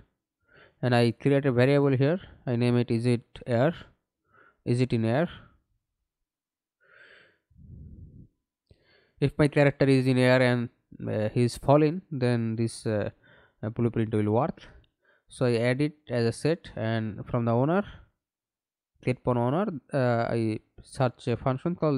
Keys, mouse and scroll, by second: 0.6 s, 1.7 shift+i, 2.0 t, 3.6-5.6 typing, 6.0 shift+Return, 7.0-7.4 scroll up 2, 7.4 right click, 13.4 right click, 16.7-19.2 typing, 20.3 Down, 20.5 Down, 21.6 Return.